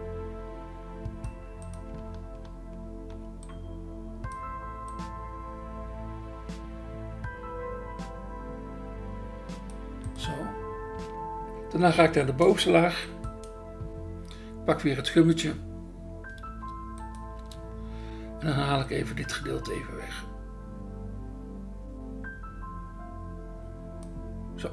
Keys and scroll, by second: 17.4 BackSpace.